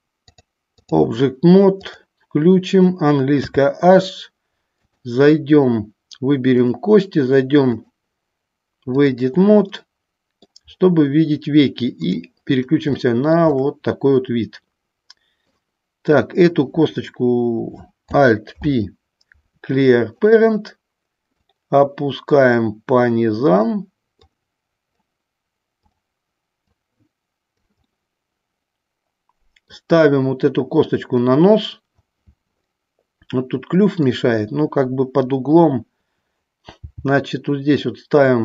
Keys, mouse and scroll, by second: 0.4 click, 1.9 click, 3.5 h, 5.0 click, 6.7 click, 7.8-9.3 drag, 10.0 middle click, 12.2 click, 13.1 shift+middle click, 13.8-16.3 middle drag, 18.7 alt+p, 21.6-23.8 drag, 24.4 click, 25.9 click, 26.9 click, 28.1-29.9 middle drag, 30.2 middle click, 32.9-34.3 middle drag, 36.9 g.